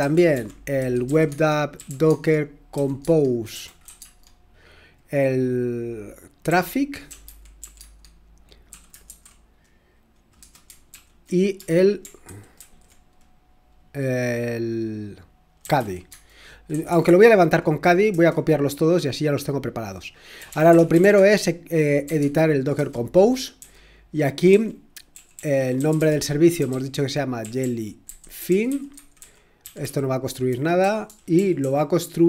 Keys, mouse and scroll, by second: 0.0-3.9 typing, 6.8-8.2 typing, 10.1-13.0 typing, 12.2 ctrl+p, 15.4-17.2 typing, 18.1 Return, 20.1-32.2 typing.